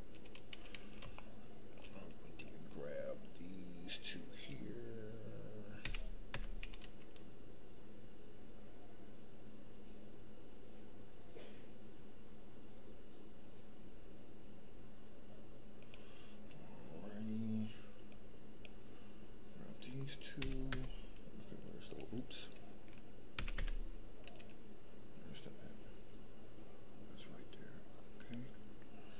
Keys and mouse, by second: 1.3 shift+middle click, 2.4-3.9 drag, 5.8 g, 6.3 x, 18.1 click, 20.3 g, 20.7 x, 23.3 g, 23.5 y, 28.1 click.